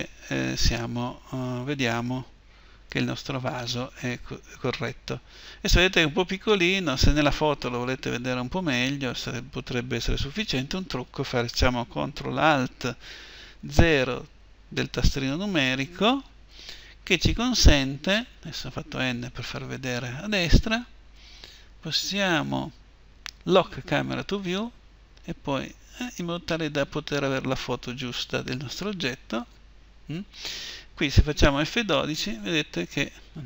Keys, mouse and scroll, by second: 17.4 n, 23.3-25.5 drag, 25.2-31.6 middle drag.